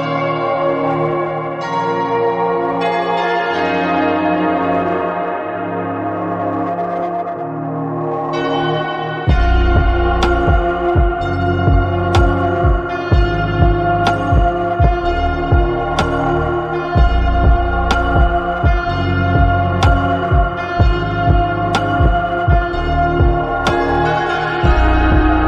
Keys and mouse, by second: 1.9-3.7 drag, 8.8-9.5 drag, 10.2 click, 11.7 click, 15.6 click, 16.4-20.1 drag, 24.3 click.